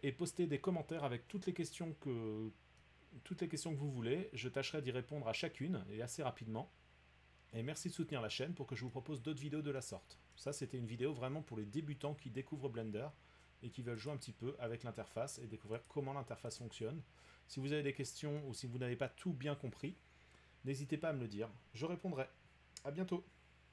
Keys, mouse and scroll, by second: 7.8 middle click, 8.9 middle click, 10.3 middle click, 14.1 click, 15.8 click, 16.6 click, 19.0 middle click.